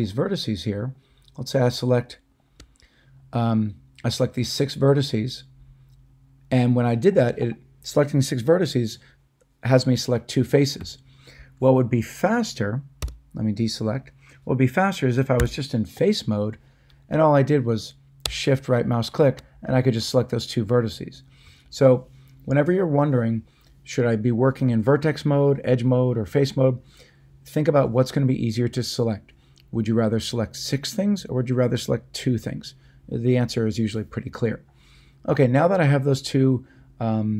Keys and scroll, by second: 13.0 a, 15.4 3.